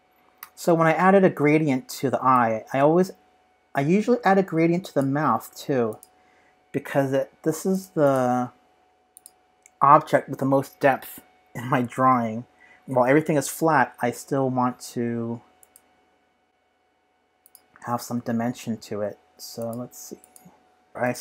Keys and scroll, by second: 20.9 v.